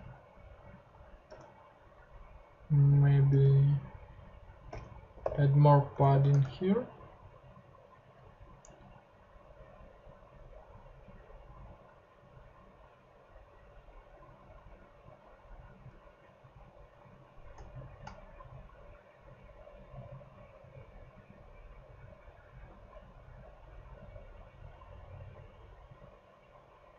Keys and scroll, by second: 1.3 p, 3.0-6.5 typing, 22.7 Right.